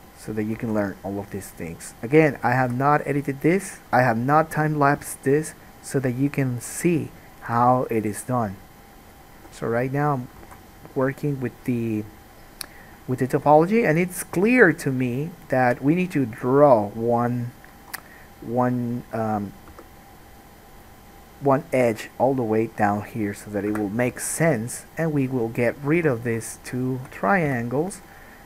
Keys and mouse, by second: 0.9 alt+a, 2.1 middle click, 2.1 right click, 2.9 g, 4.4-6.9 alt+right drag, 4.7 alt+a, 6.9 middle click, 7.0 right click, 7.7-27.7 drag, 7.7 g, 9.2 middle click, 9.2 right click, 9.6 g, 10.7 alt+a, 19.9 k, 26.1 3, 27.7 f, 28.0 middle click.